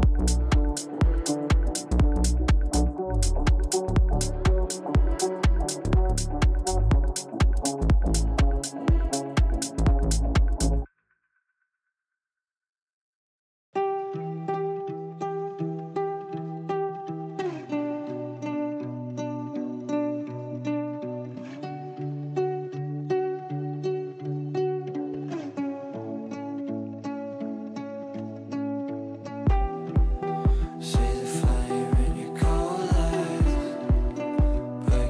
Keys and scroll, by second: 15.2 ctrl+q.